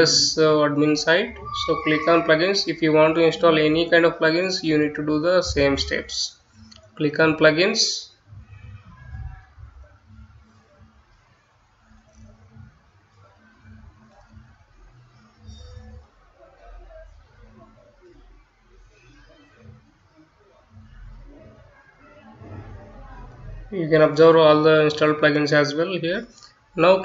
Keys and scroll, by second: 1.5-5.0 typing, 6.5 Return.